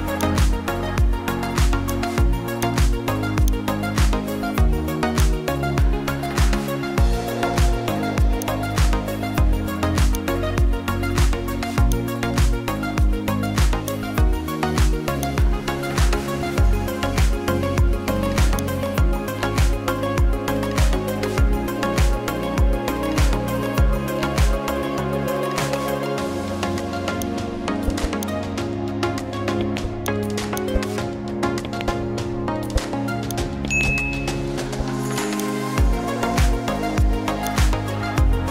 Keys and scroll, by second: 25.4 ctrl+a, 25.9 ctrl+t, 29.2 ctrl+d.